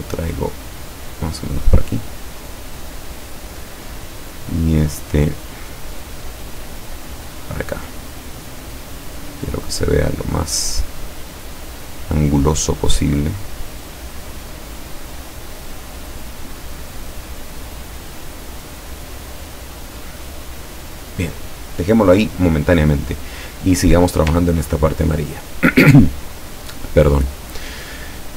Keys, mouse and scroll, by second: 1.8-3.5 drag, 5.7 click, 6.7-7.9 drag, 8.3-9.9 drag, 10.6-12.4 drag, 12.6 click, 15.3-17.2 drag, 18.1-19.6 drag, 19.9-21.2 drag, 24.0 click, 24.6 ctrl+scroll down 1, 25.6-26.6 ctrl+drag.